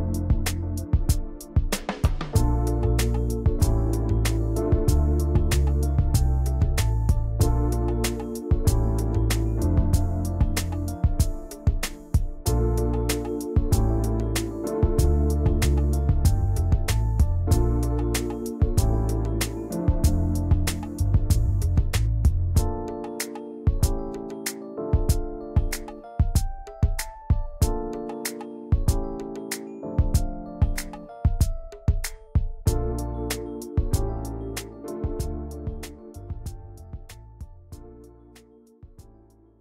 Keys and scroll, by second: 4.1 ctrl+g, 29.2 ctrl+z, 34.0 p, 36.4 v, 36.9 i, 37.9 v.